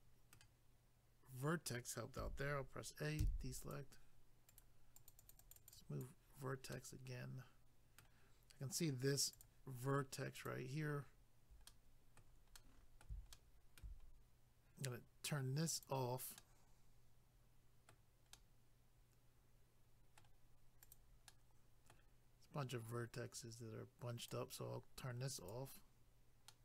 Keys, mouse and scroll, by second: 2.2 a, 3.6 click, 4.5 right click, 4.6 right click, 5.0 click, 5.1 click, 5.2 click, 5.3 double click, 5.4 click, 6.7 middle click, 9.4 click, 9.4 click, 10.3 click, 10.5 click, 11.0 scroll up 1, 11.6 middle click, 13.3 shift+middle click, 14.0 scroll up 1, 15.7 click, 15.8 click, 16.3 middle click, 18.3 middle click, 20.8 click, 20.9 click, 21.3 middle click, 22.9 click, 25.4 click, 25.5 click, 26.5 middle click.